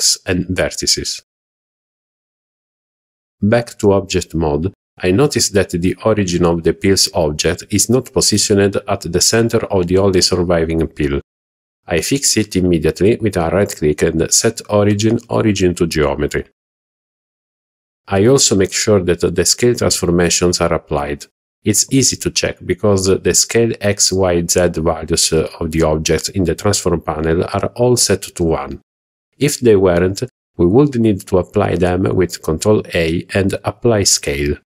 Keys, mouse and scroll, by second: 1.6 Tab, 3.2-4.3 middle drag, 5.4-6.2 middle drag, 10.0-11.3 middle drag, 12.1-13.3 right drag, 13.3 click, 14.1-16.6 right drag, 18.1-19.1 middle drag, 19.1 click.